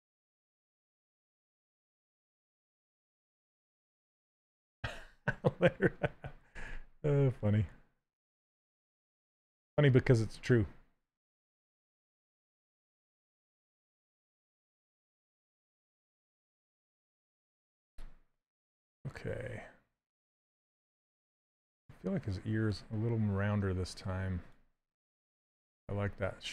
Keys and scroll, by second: 6.3 s.